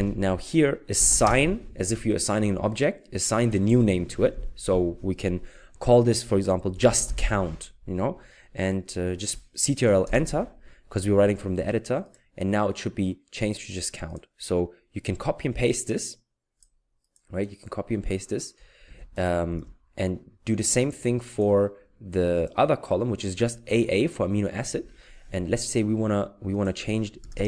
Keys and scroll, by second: 1.0 typing, 3.5-4.3 typing, 6.6-7.7 typing, 10.1 ctrl+Return, 12.2 ctrl+Return, 18.8 ctrl+c, 19.6 ctrl+v.